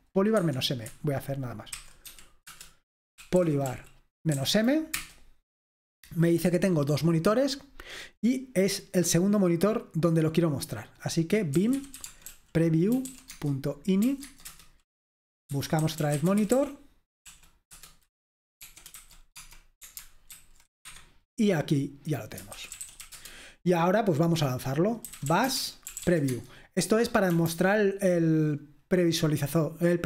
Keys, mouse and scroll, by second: 0.4 Escape, 1.5-3.7 typing, 4.4 Right, 4.4 Up, 4.9 Return, 9.3-10.6 drag, 10.9-12.0 drag, 11.7-19.5 typing, 20.3 ctrl+alt+v, 20.9 Escape, 22.6-29.3 typing.